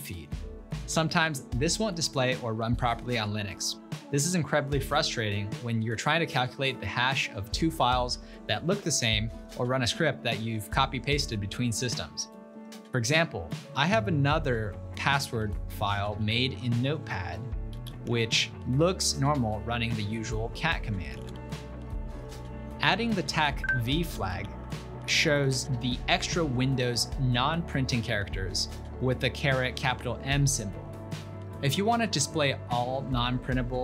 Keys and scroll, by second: 16.1 ctrl+l, 17.6-18.6 typing, 20.8-22.1 typing, 23.3 ctrl+p, 24.1 ctrl+BackSpace, 24.3 ctrl+BackSpace, 24.5 ctrl+BackSpace, 25.0-28.1 typing, 31.0-31.8 typing, 32.5 ctrl+l, 33.0 ctrl+a, 33.6 Right.